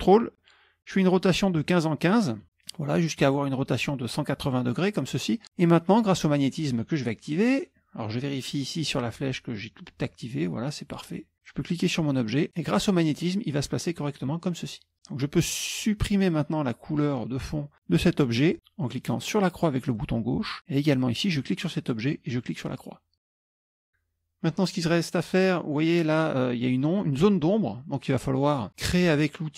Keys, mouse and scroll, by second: 4.4-5.4 ctrl+drag, 7.4 click, 8.9 click, 11.0 click, 11.5-13.9 drag, 20.0 click, 20.9 click, 23.1 click.